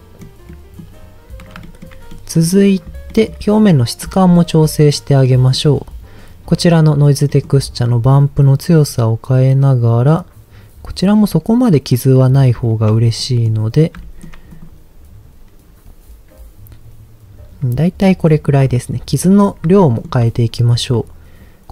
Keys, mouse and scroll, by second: 0.4 middle click, 1.2 scroll up 1, 1.6 shift+middle click, 2.1 middle click, 2.8 click, 3.1 middle click, 3.3-4.8 scroll up 6, 3.8 shift+middle click, 5.2 middle click, 6.0 scroll up 1, 7.2 middle click, 8.1-12.6 shift+drag, 13.2 middle click, 14.0 shift+middle click, 14.5 click, 17.7 middle click, 18.4 click, 18.7 middle click, 19.1-19.8 scroll down 3, 19.8 shift+middle click, 20.5 scroll down 1.